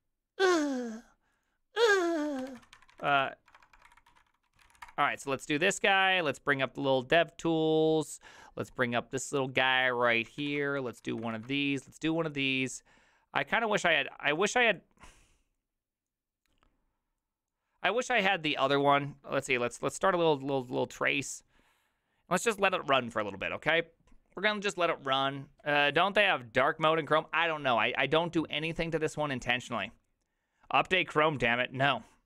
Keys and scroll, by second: 2.7-5.3 typing, 10.9 alt+q, 10.9 alt+i.